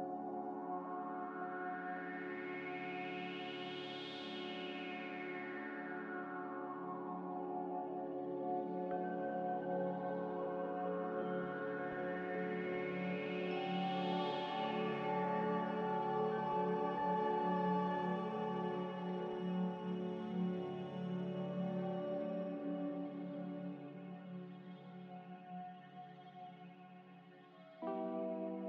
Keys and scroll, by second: 1.8 n, 2.2 b, 3.4 Delete, 7.9 n, 8.4 m, 23.0 z, 24.0 g, 27.6 n.